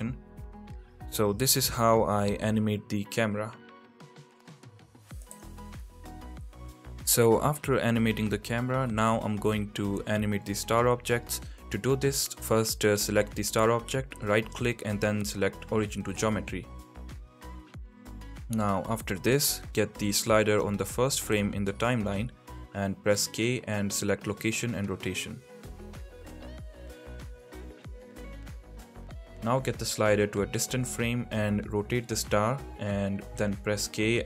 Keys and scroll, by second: 1.3 g, 5.8 space, 12.7 space, 21.1 k, 31.0 r, 31.8 z.